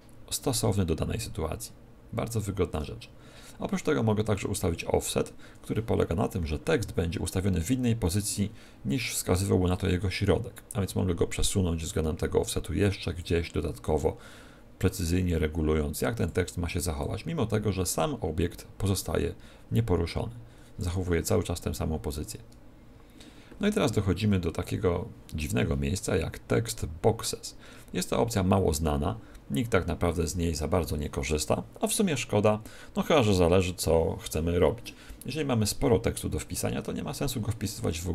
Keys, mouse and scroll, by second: 9.6 click, 13.8 shift+click, 16.9 shift+click.